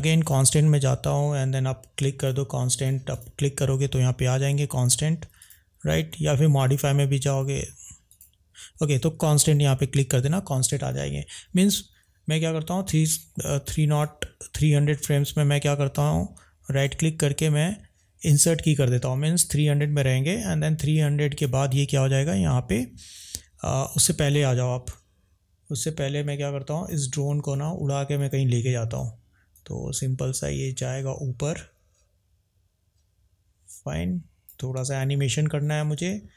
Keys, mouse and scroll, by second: 2.2 click, 3.1 click, 5.3 click, 14.0 click, 16.7-18.5 right drag, 19.8 click, 29.7 click, 35.3 ctrl+z, 36.0 click.